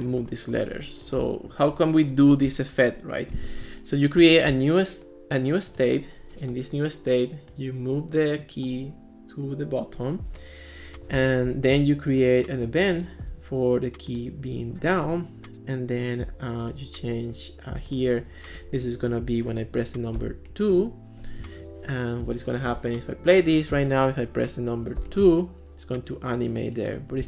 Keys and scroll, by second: 20.2 2, 20.8 Return, 25.0 2.